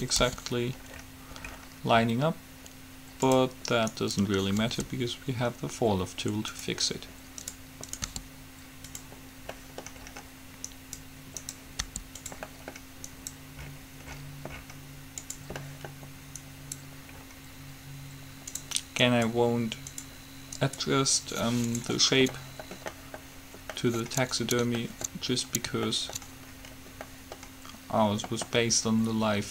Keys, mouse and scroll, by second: 0.6 g, 3.6-5.6 drag, 4.1-6.0 right drag, 4.9 g, 7.5-9.9 right drag, 8.3 g, 12.1 g, 14.0-15.1 right drag, 15.8 middle click, 16.6 right click, 16.8 middle click, 17.6-18.6 right drag, 19.2-22.6 right drag, 22.6 middle click.